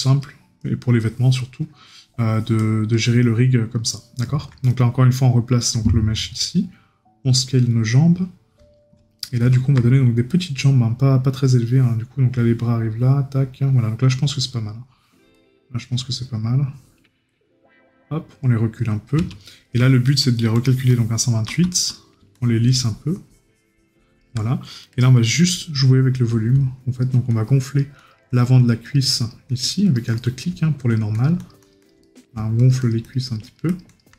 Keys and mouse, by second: 9.2 right click, 21.2 right click, 30.2 right click, 32.0 right click.